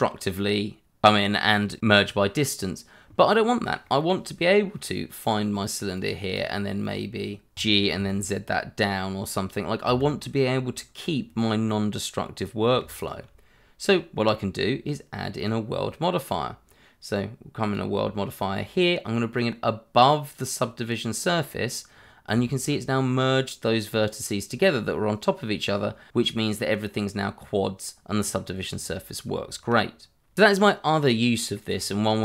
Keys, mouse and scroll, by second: 1.4 click, 3.5 scroll down 1, 3.8 middle click, 5.2 click, 6.4 double click, 7.5 g, 7.9 z, 9.8 Escape, 12.7 h, 13.0 click, 15.4 click, 17.6 click, 21.9 scroll up 1, 22.5 shift+middle click, 25.6-26.2 scroll down 1, 26.2 middle click, 26.7 scroll up 1, 30.4-31.0 scroll down 1, 31.0 middle click, 31.7-32.2 scroll up 1.